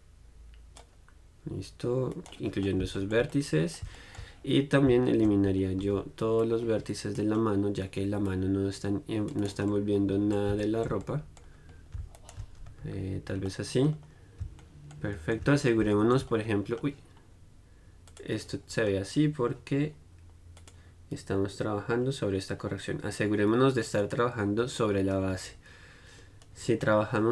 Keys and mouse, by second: 2.5-4.7 right drag, 4.7-9.7 middle drag, 9.7 right click, 9.9-11.5 middle drag, 12.4 middle click, 13.0 right click, 13.0 z, 13.7-18.3 middle drag, 18.3-26.1 drag.